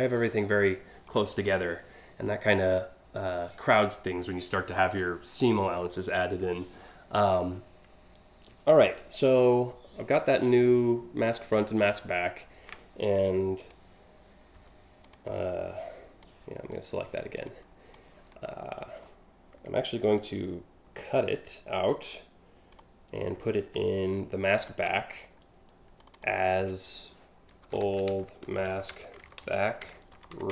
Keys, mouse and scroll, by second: 13.2 click, 14.6 click, 15.9 click, 17.0 click, 17.5 click, 20.6 ctrl+x, 22.4 click, 24.3 ctrl+shift+v, 25.6 click, 27.0-30.5 typing.